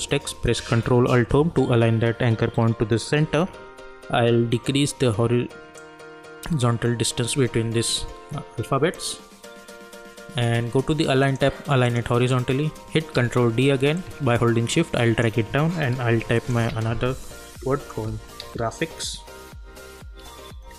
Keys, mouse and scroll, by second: 3.2 ctrl+alt+Home, 5.7-11.2 drag, 13.1 ctrl+d, 13.9-16.1 drag, 16.1 ctrl+t, 16.3 click, 16.7 ctrl+a, 17.7-20.7 typing.